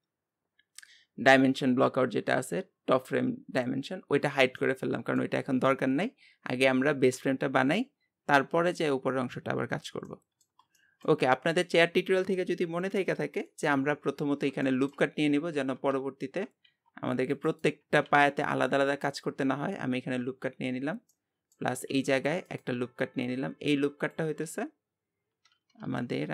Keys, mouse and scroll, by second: 4.6-7.7 middle drag, 10.2-13.9 middle drag, 14.3 scroll up 2, 14.7 shift+middle click, 15.4 Tab, 15.8 Tab, 16.7 ctrl+r, 18.0 ctrl+r, 20.1-21.1 scroll down 1, 21.1 middle click, 21.9 ctrl+r, 23.2-26.3 drag.